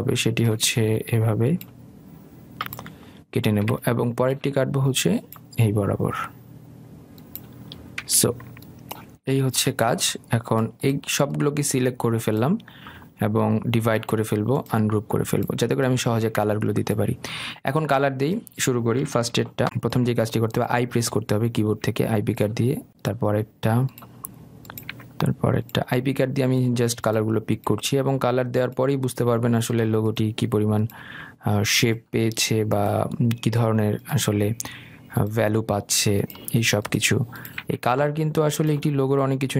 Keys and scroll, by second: 3.9 Escape, 20.0 i, 39.1 i.